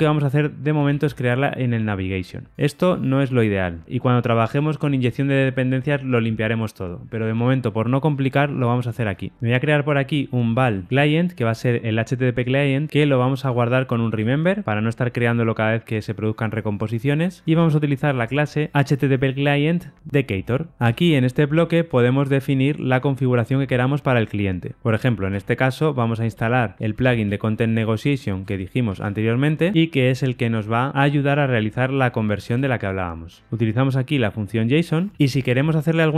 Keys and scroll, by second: 20.4 Return, 26.3 Return, 32.6 alt+Return, 34.4 Escape.